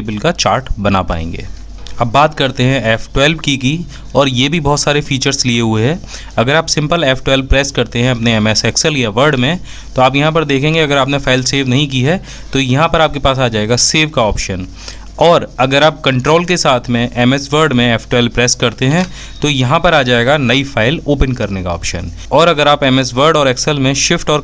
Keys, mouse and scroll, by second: 1.9 f, 15.0 ctrl+F1, 22.1 s, 22.7 ctrl+shift+f.